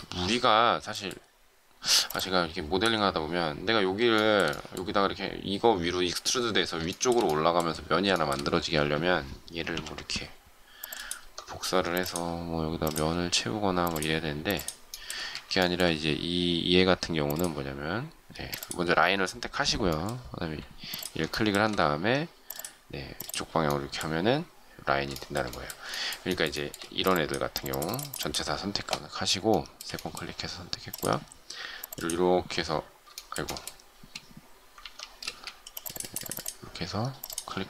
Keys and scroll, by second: 9.7 m, 15.2 space, 18.3 space, 26.8 shift+space, 35.2 ctrl+z, 35.2 space.